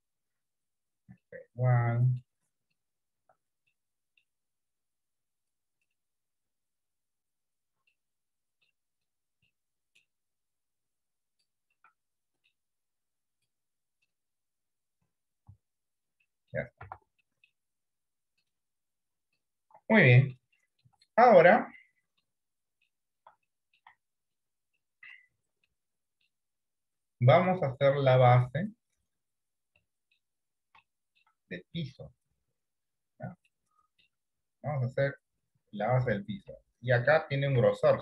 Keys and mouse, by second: 0.1 click, 1.3-2.3 middle drag, 3.7 middle click, 4.9 click, 7.0 click, 7.9 middle click, 9.6 middle click, 10.7 click, 11.8 middle click, 13.0 click, 15.0 click, 15.6 Tab, 16.4 middle click, 16.9 Tab, 17.3 middle click, 20.3 middle click, 20.9 shift+middle click, 22.1 middle click, 22.9 shift+middle click, 23.7 middle click, 24.2 shift+middle click, 24.9 middle click, 25.8 middle click, 27.6 click, 29.9 shift+middle click, 30.9 shift+middle click, 33.5 shift+middle click, 37.1 shift+middle click, 37.8 shift+middle click.